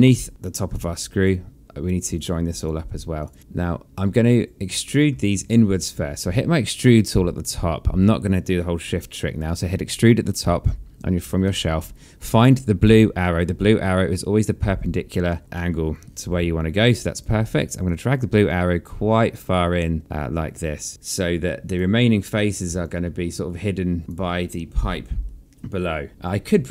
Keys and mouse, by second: 0.4 alt+click, 0.8 right click, 1.7 alt+click, 2.9 click, 3.3 alt+click, 4.4 click, 11.0 alt+middle click, 11.9 alt+click, 13.8 alt+click, 16.2 alt+click, 17.4 click, 20.9 click, 22.4 alt+click, 25.8 alt+click, 26.4 alt+middle click.